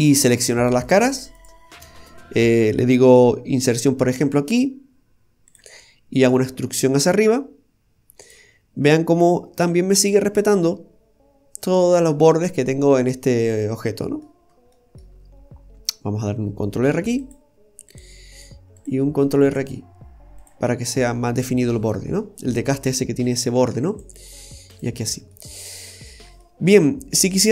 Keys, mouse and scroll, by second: 0.8 right click, 1.2 alt+shift+right click, 2.1 middle click, 5.8 middle click, 6.9 e, 9.6 ctrl+r, 12.4 middle click, 14.4-14.7 scroll down 1, 14.7 middle click, 15.5 scroll up 2, 16.9 ctrl+r, 18.8 click, 19.2 ctrl+r, 20.7 scroll down 1, 20.9 middle click, 21.8 scroll down 2, 22.2 middle click, 23.6 ctrl+r, 25.1 scroll down 1, 25.3 middle click, 26.0-26.6 scroll up 2, 26.4 middle click, 26.9 scroll up 1, 27.3 middle click.